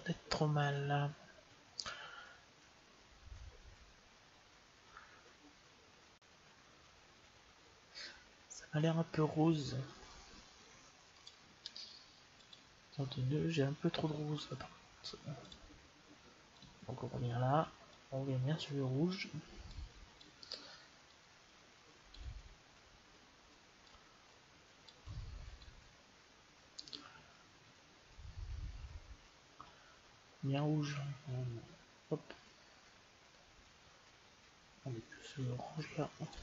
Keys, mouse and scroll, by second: 11.0-12.8 drag, 15.2-16.4 drag, 20.1-22.1 drag, 23.8-27.9 drag.